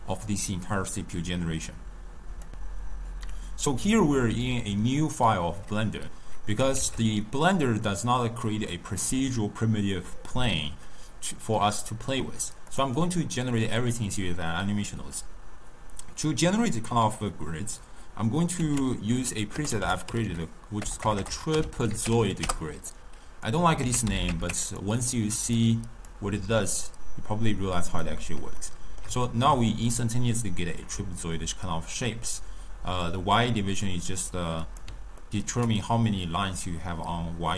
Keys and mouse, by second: 6.8 shift+a, 12.8 click, 18.6 ctrl+a, 21.0 BackSpace, 23.9 ctrl+a, 26.1 drag, 27.9 click, 28.6-32.3 ctrl+middle drag, 33.1-35.3 drag, 35.3-37.5 middle drag.